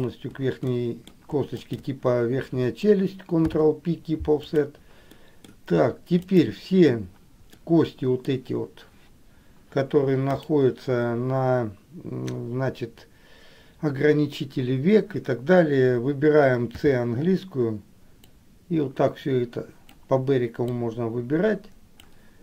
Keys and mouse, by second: 0.2 shift+click, 0.9 middle click, 1.9 shift+click, 3.6 ctrl+p, 5.4 middle click, 7.8 middle click, 10.4 click.